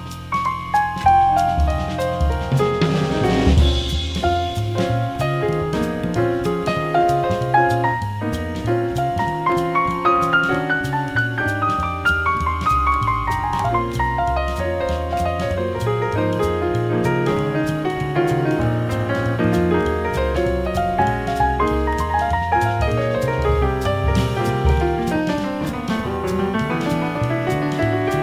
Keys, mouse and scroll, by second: 3.2 b, 9.4 n, 9.7 t, 11.7 space, 18.2 BackSpace, 18.8 BackSpace.